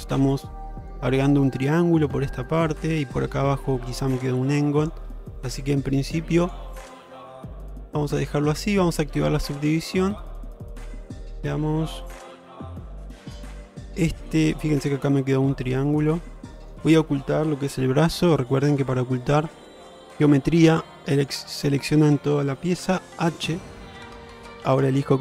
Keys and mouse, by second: 0.1 g, 1.9-2.9 middle drag, 3.8-5.0 middle drag, 5.4 middle click, 6.5 click, 7.4 g, 8.7 middle click, 9.7 click, 10.2-13.6 middle drag, 14.1 middle click, 15.6-16.8 middle drag, 20.2 3, 21.2 ctrl+alt+click.